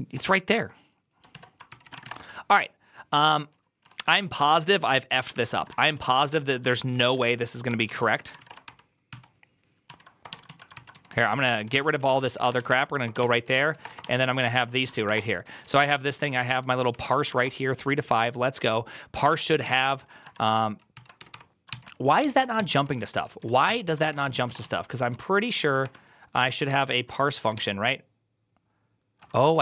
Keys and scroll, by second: 1.6 alt+{, 1.6 ctrl+c, 1.6-2.4 typing, 3.5-8.8 typing, 6.3 ctrl+u, 6.5 ctrl+c, 7.5 ctrl+d, 7.8 ctrl+c, 7.9 ctrl+c, 9.0 ctrl+t, 9.7 ctrl+o, 10.1-24.8 typing, 10.3 ctrl+e, 20.8 ctrl+c, 24.9 ctrl+u, 25.3 ctrl+u, 25.7 ctrl+d, 26.6 ctrl+d, 26.8 ctrl+u, 27.4 shift+g, 28.8-29.6 typing.